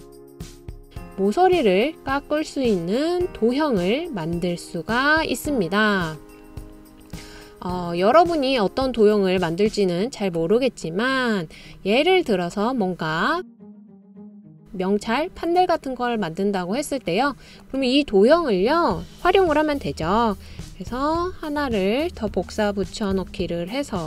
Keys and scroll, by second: 21.3 super+c, 21.6 super+v.